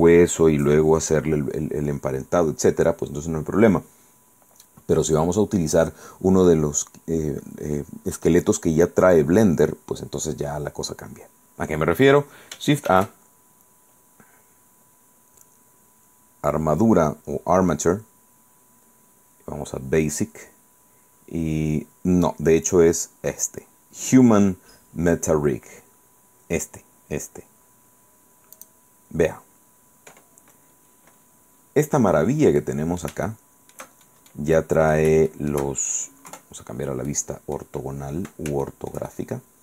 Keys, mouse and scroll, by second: 13.0 shift+a, 28.7 click, 30.1-30.7 scroll up 1, 30.8-31.2 scroll up 1, 31.7-32.0 scroll up 1, 32.0-32.6 scroll down 3, 32.7 middle click, 33.4 shift+middle click, 34.0-34.7 shift+scroll down 5, 34.5 middle click, 34.7 middle click, 35.4 shift+middle click, 36.4 KP_5, 37.2 middle click, 37.2 scroll down 2, 38.0-38.5 scroll up 2, 38.8-39.6 shift+drag.